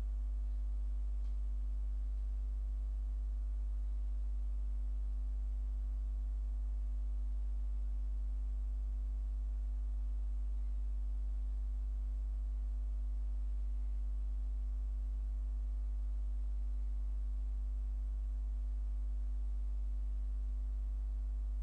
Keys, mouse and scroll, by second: 0.1 click, 0.5 click, 1.5 ctrl+a, 3.5-4.5 drag.